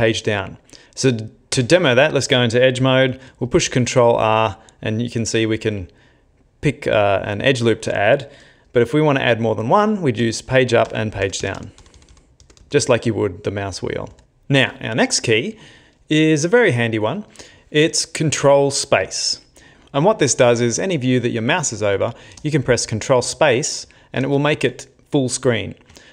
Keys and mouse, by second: 0.8 shift+middle click, 1.5 Tab, 3.5 ctrl+r, 22.4 ctrl+space, 24.2 ctrl+space.